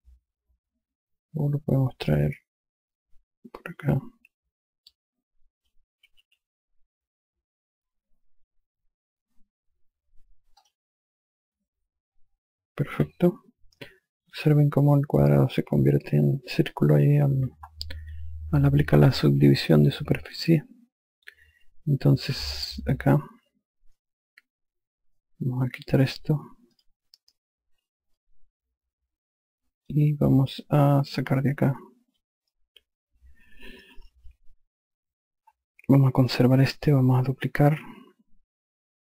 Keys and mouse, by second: 0.1 click, 4.1 click, 6.6 q, 11.1 click, 22.9 F1, 26.7 click, 28.7 alt+click, 31.9 click.